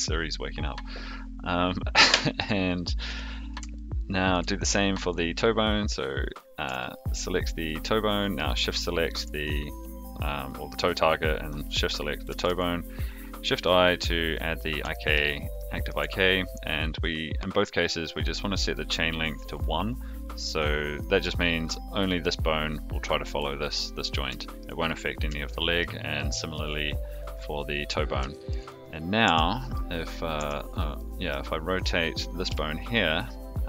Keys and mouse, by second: 3.7-4.3 shift+middle drag, 6.8-7.2 shift+middle drag, 8.2 shift+click, 12.4 shift+i, 14.9 shift+middle drag, 15.5 shift+middle drag, 18.7 click, 19.4 click, 21.1 click, 21.9 click, 24.4 shift+middle click, 25.5 shift+middle drag, 26.1-26.5 shift+middle drag, 27.4 click, 28.3 shift+middle drag, 29.2 Tab, 29.7 click, 30.3 Tab, 30.9 middle click, 32.4 KP_3.